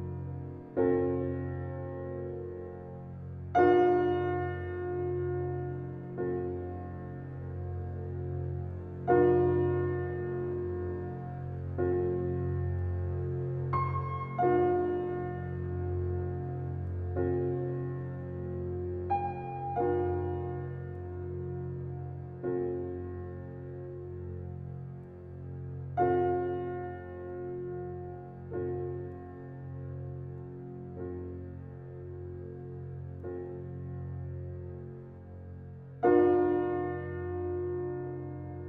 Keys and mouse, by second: 0.7 click, 1.5 n, 2.3 click, 3.2 click, 5.4 click, 6.6 alt+middle click, 7.3 alt+drag, 7.7 alt+middle click, 8.2-12.4 alt+drag, 12.0-12.8 typing, 14.3 click, 15.8-18.6 alt+drag, 18.7 alt+click, 19.0 alt+click, 20.1-21.9 alt+drag, 20.4 alt+Tab, 22.7-24.7 drag, 24.8 shift+click, 26.0 alt+shift+click, 26.4 shift+click, 26.4 typing, 27.3 alt+shift+click, 27.9 shift+click, 29.1 alt+shift+click, 29.7 shift+click, 31.1 alt+click, 32.6 click, 32.9 typing, 34.6 click, 34.6 typing, 34.9 alt+click, 35.4 click, 36.0-36.4 typing, 37.5-38.6 alt+drag.